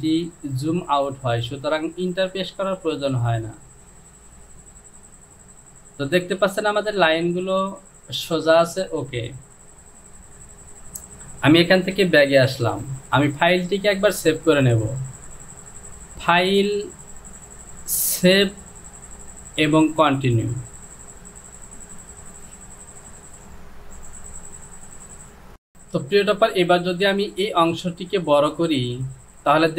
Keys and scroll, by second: 12.4 ctrl+z.